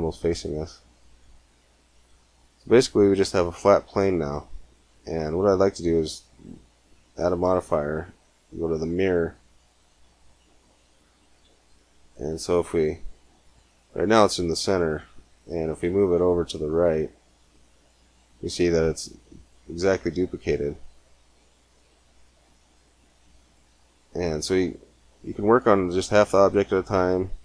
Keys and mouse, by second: 0.0-4.7 middle drag, 7.0-8.9 drag, 10.3 middle click, 11.2 g, 12.4 click, 15.6 g, 18.7 click, 20.6-22.0 middle drag, 22.5-26.9 middle drag, 26.9-27.4 drag.